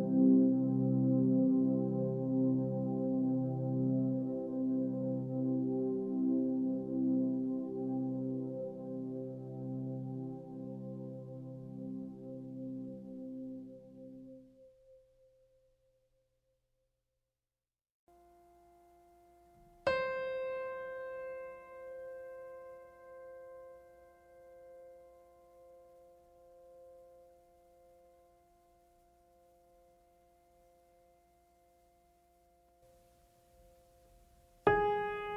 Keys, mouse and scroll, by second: 5.6 click, 9.2 scroll up 1, 10.5 click, 12.4-12.9 scroll up 1, 13.9 scroll down 1, 15.2 click, 16.3-16.9 scroll down 1, 18.0 click, 19.3 scroll down 1, 21.8 scroll down 1, 30.3-31.6 scroll down 1, 32.3 click, 34.5 scroll down 1.